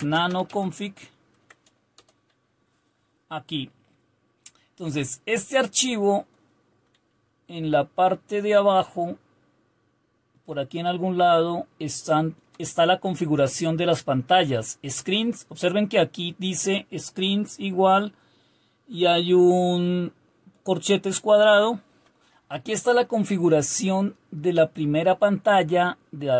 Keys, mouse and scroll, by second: 0.0-0.9 typing, 1.3 Tab, 1.9 Return, 3.3-13.3 Down, 13.3-14.2 Up, 13.8-17.0 typing, 21.8 Right, 22.3 Up, 22.3 Left, 22.4 Left, 22.6 Left, 23.7 Down.